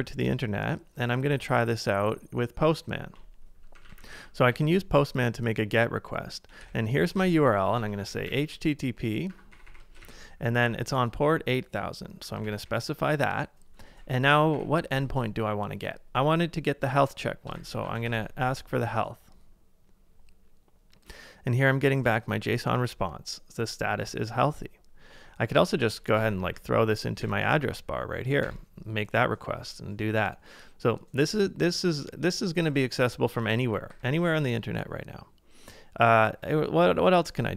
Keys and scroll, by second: 3.7 super+=, 3.9 super+=, 4.0 super+=, 6.6 super+v, 7.8 super+h, 7.8-10.6 typing, 12.0-13.1 typing, 14.5 /, 18.2 typing, 26.2 super+c, 26.4 super+t, 27.2 super+v, 28.4 Return, 33.9 super+w.